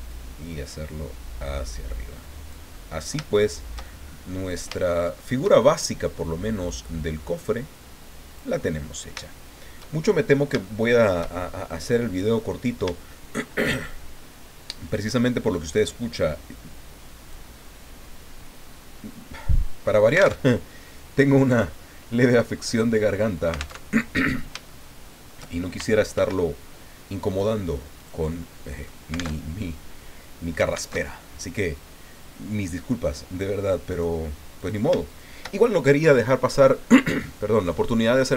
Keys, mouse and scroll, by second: 0.1-2.7 drag, 2.7 middle click, 3.3-5.6 shift+middle drag, 6.7-9.2 drag, 9.7 shift+click, 9.9 shift+click, 10.6-12.1 shift+drag, 12.4 click, 13.1 shift+click, 15.6-17.5 drag, 17.8 scroll up 2, 20.4 alt+Tab, 23.8 alt+Tab, 24.7 shift+click, 26.1 ctrl+r, 27.3 click, 28.0 click, 28.7 click, 29.3 alt+Tab, 30.9 alt+Tab, 33.9 right click, 34.6 right click, 35.1 shift+right click.